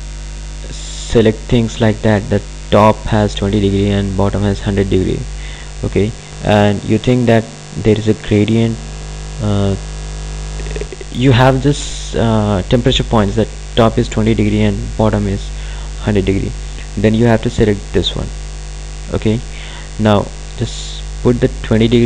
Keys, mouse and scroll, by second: 17.7 click, 20.4 click.